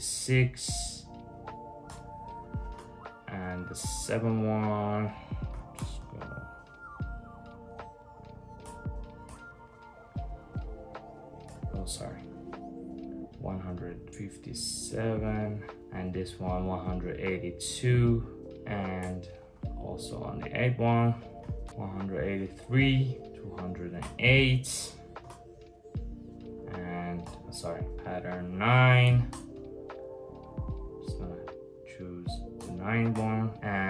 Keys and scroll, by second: 1.5 Return, 2.4 super+j, 5.2 7, 5.4 Return, 8.3 Return, 8.9 Return, 11.1 Return, 18.6 Return, 21.0 8, 21.3 Return, 23.6 Return, 24.8 super+j, 26.9 Return, 28.7 9, 28.9 Return, 32.2 Return, 32.8 Return.